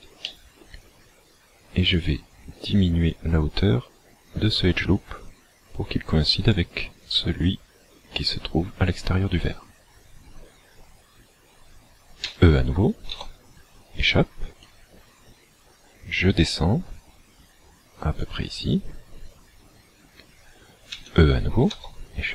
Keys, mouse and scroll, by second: 0.2 shift+middle click, 1.9 click, 8.2-10.0 scroll down 3, 12.2 e, 14.7 click, 20.9 e.